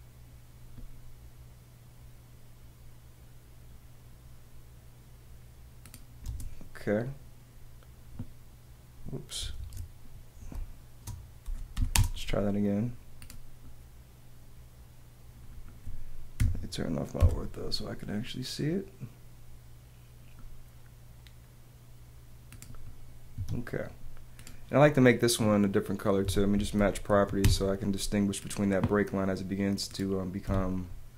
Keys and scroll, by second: 6.2 space, 9.6 super+z, 10.6 super+space, 11.4 p, 12.0 space, 12.8 space, 17.2 F8, 23.3 Escape, 26.2 Escape, 27.4 space, 30.4 Escape.